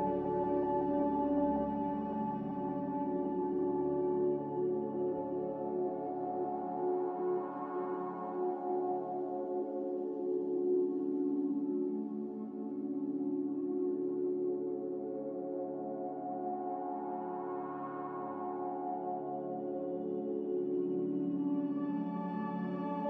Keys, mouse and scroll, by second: 0.9 4, 1.2 Return, 4.0 4, 4.3 Return, 17.2 ctrl+z, 19.3 Escape, 21.4 3, 21.7 Return.